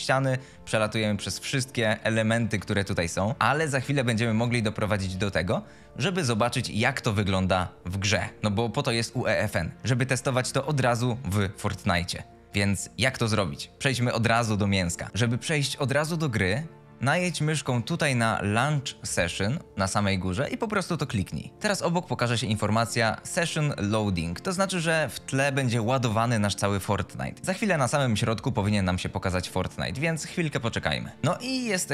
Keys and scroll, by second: 1.7-5.4 typing, 19.2 F2, 27.4 F22.